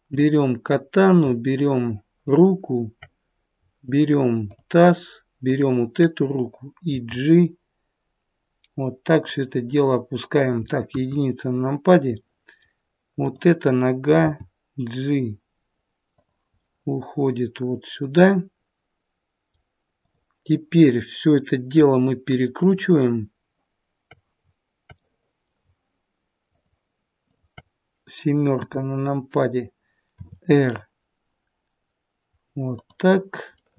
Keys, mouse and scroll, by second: 0.1 click, 2.1 shift+click, 6.8 shift+click, 6.8 g, 10.8 KP_1, 12.1 middle click, 13.1 click, 14.2 g, 16.5 middle click, 17.8 middle click, 20.0 middle click, 20.1 click, 22.6 shift+click, 24.9 middle click, 26.4 shift+click, 28.0 shift+click, 28.5 KP_7, 30.1 r, 33.4 middle click.